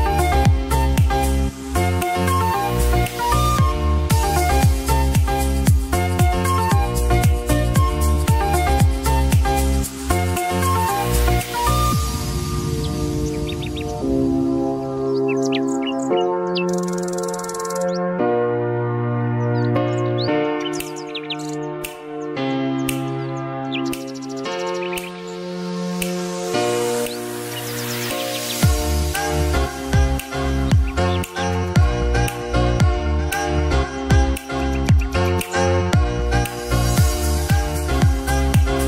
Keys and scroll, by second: 1.5 ctrl+e, 2.8 Delete, 6.7 BackSpace, 7.4 a, 7.8 p, 8.1 l, 9.8-13.5 typing, 13.9 Return, 19.0 ctrl+j, 20.8-21.7 typing, 23.5 b, 23.8 u, 24.0 r, 24.4 n, 29.0 ctrl+s.